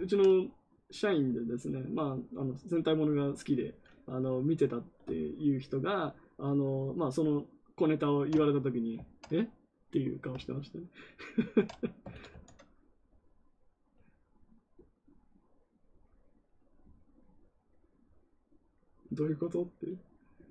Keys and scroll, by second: 12.0 ctrl+z, 12.2 ctrl+z.